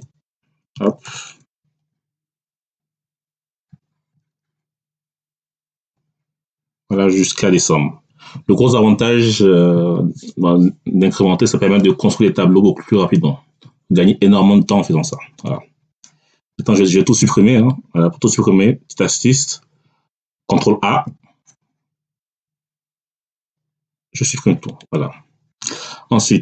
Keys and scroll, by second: 0.0-0.9 typing, 1.3 Tab, 20.0 ctrl+a.